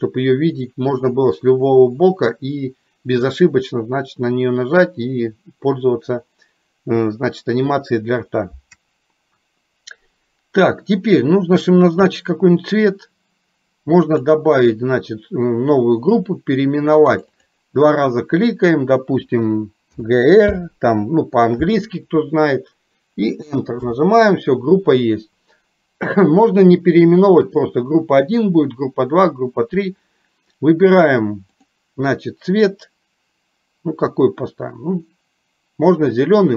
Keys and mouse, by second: 11.9 click, 14.1 click, 17.5-24.1 drag, 31.7-36.5 drag.